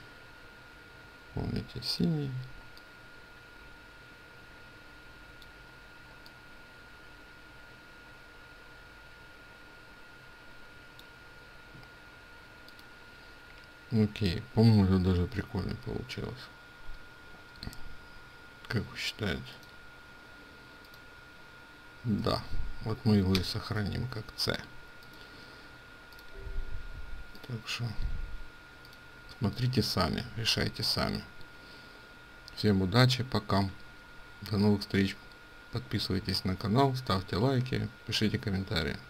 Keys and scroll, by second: 23.4 ctrl+shift+s.